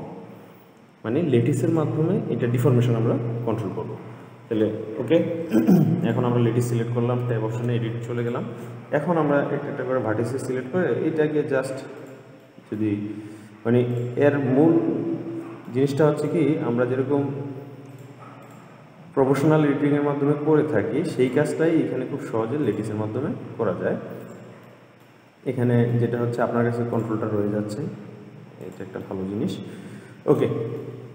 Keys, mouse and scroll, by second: 6.3 click, 7.5 Tab, 8.4 click, 10.9 g, 12.7 middle click, 13.3-13.8 scroll down 2, 14.2 click, 14.9-16.4 middle drag, 16.4 click, 17.0 g, 18.7 click, 19.2 g, 21.9-22.9 middle drag, 22.9 click, 23.4 g, 24.9-27.2 middle drag, 27.2 click, 27.6 g, 29.3-31.1 middle drag.